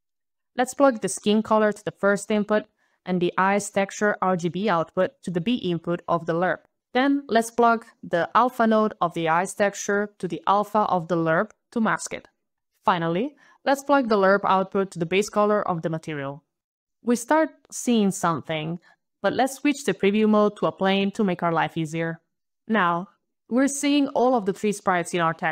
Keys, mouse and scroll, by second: 1.2 click, 3.2 click, 9.5 click, 14.3 click, 17.1 click, 20.8 click, 21.6 click, 22.7 click.